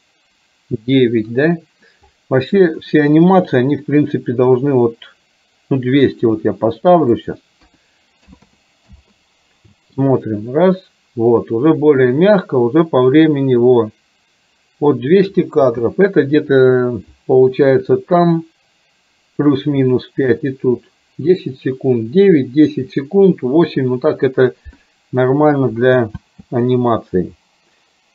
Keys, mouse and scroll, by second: 7.2-9.1 drag, 8.6 KP_0, 9.8 space, 15.6 space, 26.3 space.